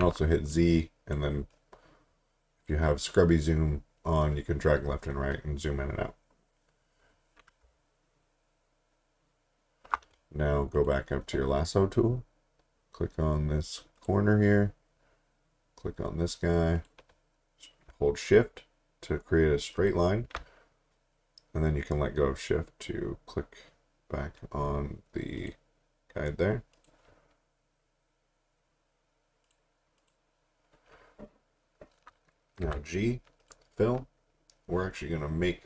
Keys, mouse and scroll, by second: 0.0 z, 0.5 click, 5.9-7.6 scroll up 1, 7.8-8.1 alt+scroll up 3, 8.6 alt+scroll up 1, 9.0 alt+scroll down 1, 9.5 alt+scroll up 1, 13.0 click, 14.0 click, 16.8 click, 19.8 click, 25.4 click, 29.4 click, 32.6 g, 33.4 click.